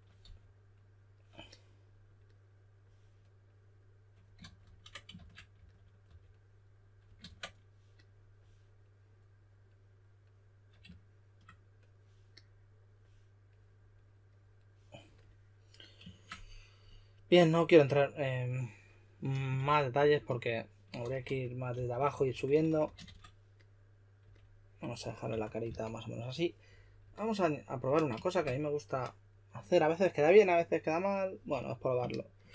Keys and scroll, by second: 0.0-0.7 typing, 4.4 super+z, 4.6 super+z, 4.9-6.5 typing, 19.3-23.5 typing, 25.0-26.1 typing, 31.5 s.